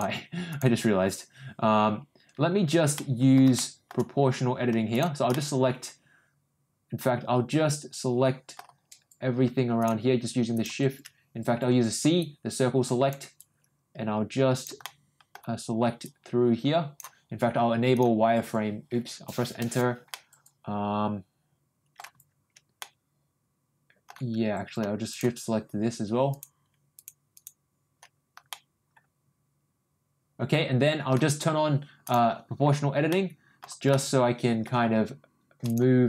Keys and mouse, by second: 0.5 click, 2.9 middle click, 3.5 shift+middle click, 4.9 shift+click, 5.3-8.5 middle drag, 9.7 shift+click, 10.5 shift+click, 11.7 c, 20.1-21.9 middle drag, 22.7-24.0 middle drag, 25.1 shift+click, 26.3 shift+click, 26.9 shift+click, 27.3 shift+click, 28.4-31.0 middle drag, 32.0 click, 33.1 middle click, 33.9 middle click, 34.9 g.